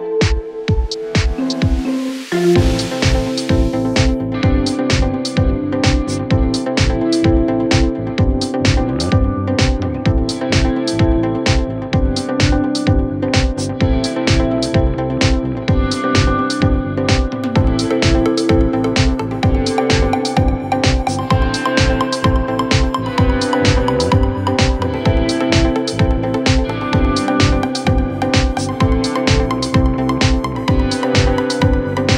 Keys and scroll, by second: 15.2 3, 16.2 ], 18.3 4, 24.2 3, 25.8 4, 28.3 ctrl+z, 31.9 ctrl+z.